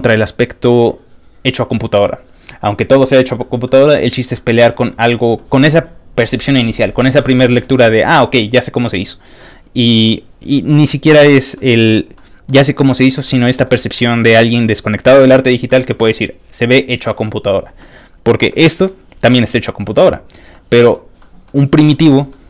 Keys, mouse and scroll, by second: 3.4 middle click, 4.3 middle click, 7.1 middle click, 7.8 middle click, 9.4 middle click, 11.5 middle click, 12.1 middle click, 13.2 middle click, 13.9 middle click, 15.7 middle click, 17.8 middle click, 18.5 middle click, 20.5 middle click, 21.2 middle click, 21.8 middle click, 22.1 middle click.